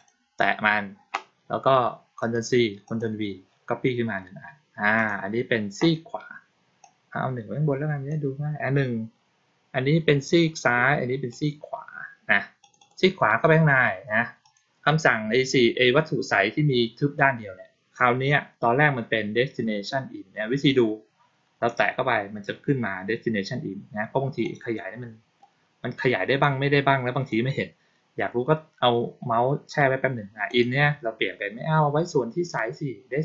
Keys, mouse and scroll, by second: 2.1 click, 2.7 click, 4.8 click, 6.7-8.0 drag, 11.2 click, 12.5 click, 12.7 click, 14.3 click, 24.3 click, 26.3 click, 30.4 click.